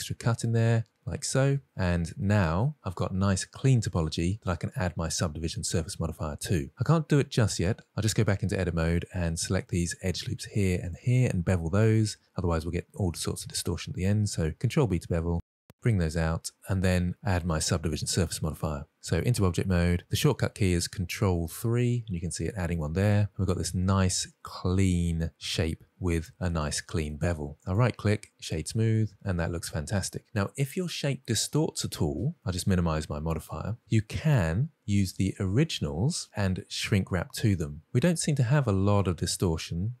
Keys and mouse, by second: 2.0 middle click, 2.6 Tab, 3.0-5.6 middle drag, 7.8 Tab, 10.0 2, 10.5 alt+click, 11.6 alt+drag, 13.7-14.1 middle drag, 15.2 ctrl+b, 17.3 middle click, 19.9 Tab, 21.9 ctrl+3, 23.8-25.7 middle drag, 27.4-28.0 middle drag, 28.3 click, 29.2-31.2 middle drag, 32.0 click, 32.7 click, 38.1-40.0 middle drag.